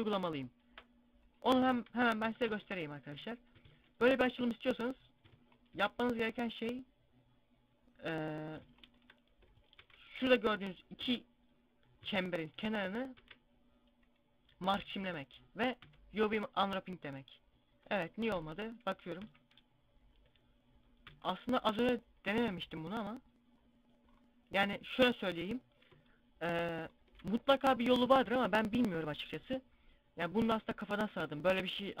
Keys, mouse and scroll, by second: 2.1 Tab, 3.0 a, 3.8 alt+shift+right click, 8.0 right click, 8.8 alt+shift+right click, 9.5 ctrl+e, 10.9 a, 12.2 alt+shift+right click, 13.1 ctrl+e, 14.6 a, 14.9 a, 15.7 u, 17.0 scroll up 1, 18.1 KP_1, 18.2 KP_5, 19.0 u, 20.9 u, 22.5 scroll down 1, 23.8 scroll down 4, 24.9 scroll down 1, 25.8 middle click.